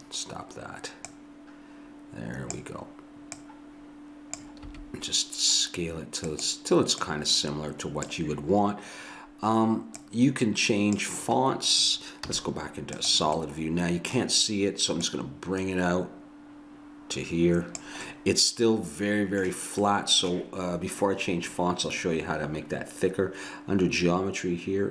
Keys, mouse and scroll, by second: 4.7 s, 8.2 click, 12.3 z, 13.0 z, 13.7-15.1 middle drag, 15.1-16.8 drag, 18.1 middle click, 18.7 middle click.